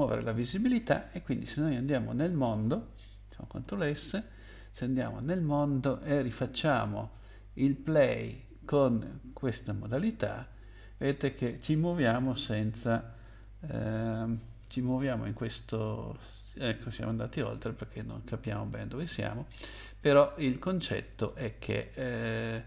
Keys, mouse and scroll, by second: 3.5 ctrl+s, 5.2 click, 8.1 click, 12.2 w, 13.7 Up, 14.4 Up, 14.9 Up, 15.1 Up, 15.1 Up, 15.5 Up, 19.0 click, 20.6 click.